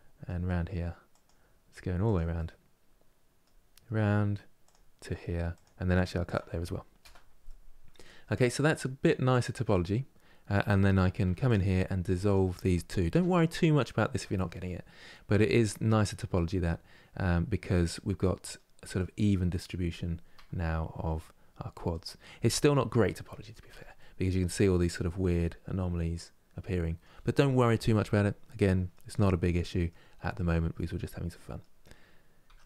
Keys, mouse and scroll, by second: 7.2-10.9 middle drag, 10.9 2, 11.2-12.8 drag, 12.8 Delete, 14.3-16.4 middle drag, 16.4 scroll down 2, 16.9-19.3 middle drag, 19.3 scroll up 2, 20.9-22.0 middle drag, 22.0-22.4 scroll down 1, 22.4 middle click, 23.1-23.4 scroll down 2, 23.4 Tab, 23.7-28.9 middle drag, 28.9 scroll up 3, 29.3 middle click, 29.8-30.2 scroll down 1, 30.3 Tab, 31.0-32.2 middle drag, 32.2 Tab, 32.5 middle click.